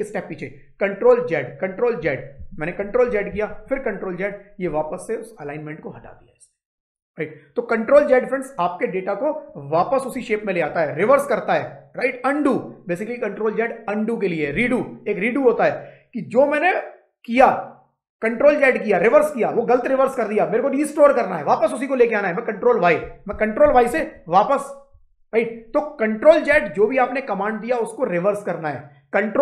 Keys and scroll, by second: 2.2 ctrl+z, 23.5 ctrl+y.